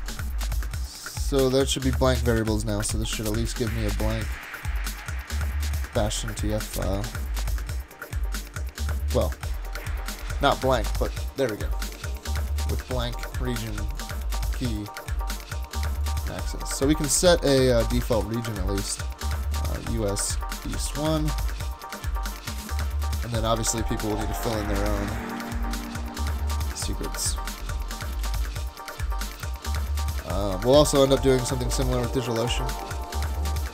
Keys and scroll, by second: 2.9 Return, 17.8 space, 18.2 super+Tab, 19.3 super+Tab, 19.6-21.7 typing, 22.0 super+s, 24.3 typing, 25.4 super+s, 27.1-27.7 typing, 28.2 super+s.